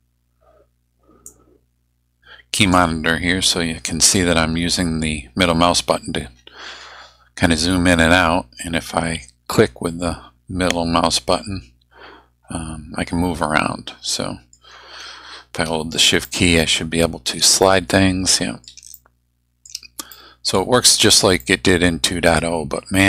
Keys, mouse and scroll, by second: 1.3-2.9 drag, 4.1-4.6 scroll down 1, 5.2 scroll up 2, 5.7 scroll down 1, 6.3-7.2 scroll up 4, 7.2-7.6 scroll down 2, 8.2 middle click, 8.7 click, 9.4 middle click, 10.0 click, 10.6-14.7 middle drag, 16.2-17.5 shift+middle drag, 17.6-18.8 shift+middle drag, 18.9 shift+middle click, 20.1 shift+middle click, 21.4 middle click, 22.4-23.0 scroll up 6.